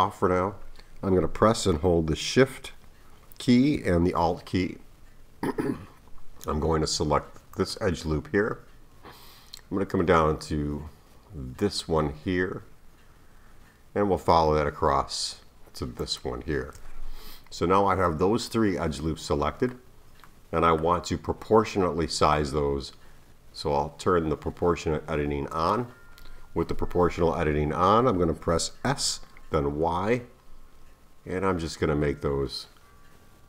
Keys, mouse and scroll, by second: 7.5 alt+shift+click, 11.6 alt+shift+click, 16.0 alt+shift+click, 18.0-19.6 middle drag, 20.7 middle click, 20.8-23.9 scroll up 1, 25.5 click, 28.9 s.